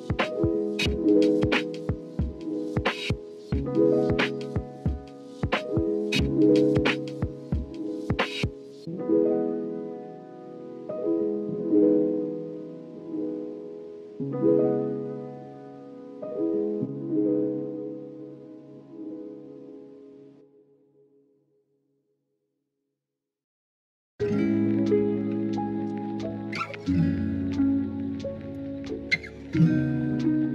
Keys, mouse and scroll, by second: 1.0-2.4 middle drag, 2.8-5.6 middle drag, 5.6 ctrl+r, 7.2 s, 13.1 middle click, 13.8 KP_1, 17.8 KP_3, 19.0 r, 22.4 Tab, 24.8 KP_1, 29.4 shift+middle click, 29.7 scroll up 1, 29.8-30.5 middle drag.